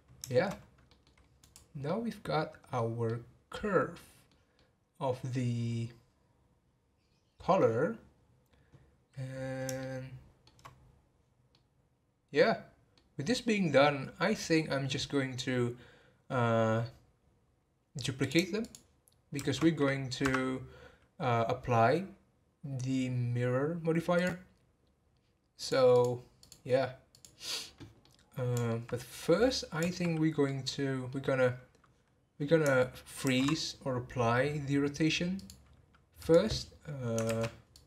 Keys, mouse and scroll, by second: 0.2 shift+middle drag, 0.5 scroll up 2, 0.9-1.4 middle drag, 1.4 click, 1.8-7.6 middle drag, 9.8-13.8 shift+middle drag, 13.8-14.1 scroll down 2, 15.7-17.3 scroll down 4, 18.2 click, 18.6 shift+click, 19.3 shift+d, 24.1 click, 25.6 click, 25.9 click, 26.4 click, 27.1 click, 28.0-33.2 middle drag, 33.2 ctrl+a, 36.2 click.